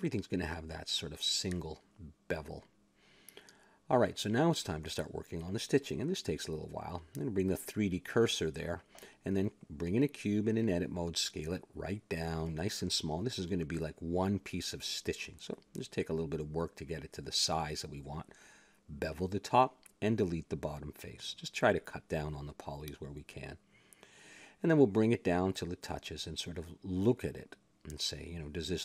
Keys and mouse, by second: 0.1 ctrl+b, 1.5 a, 1.7 Tab, 2.3 click, 3.1 a, 6.0-7.3 drag, 6.1 Tab, 7.3 shift+s, 7.4 click, 8.3 a, 8.5 Tab, 9.3 shift+a, 10.3 click, 10.6 Tab, 11.3 s, 13.2 KP_Decimal, 14.5 click, 15.4 middle click, 16.0 s, 17.3 click, 18.0 s, 19.0 click, 19.5 ctrl+b, 20.6 a, 20.7 middle click, 22.2 click, 23.2 x, 23.7 middle click, 24.4 a, 25.5 click, 27.0 Tab.